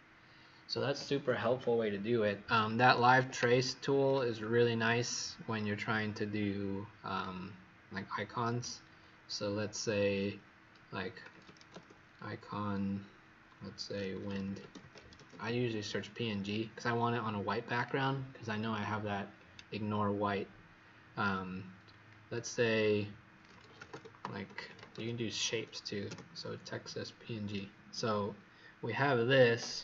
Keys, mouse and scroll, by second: 2.7 Escape, 3.1 Escape, 4.0 click, 10.9-12.0 typing, 13.9-15.6 typing, 17.7 click, 22.8 click, 23.5-25.4 typing, 26.0 Return, 29.0-29.8 scroll down 2.